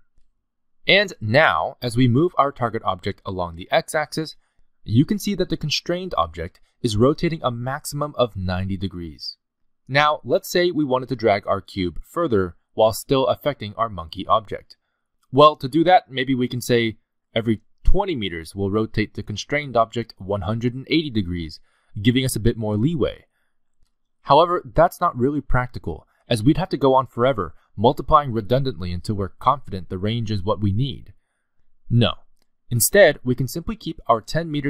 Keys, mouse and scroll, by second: 2.8 click, 3.9 g, 17.0 click, 18.4 click, 20.5 click, 22.3 click, 22.8 g, 28.7-29.4 scroll down 4, 29.4 g, 32.1-32.4 scroll up 6, 32.7 click.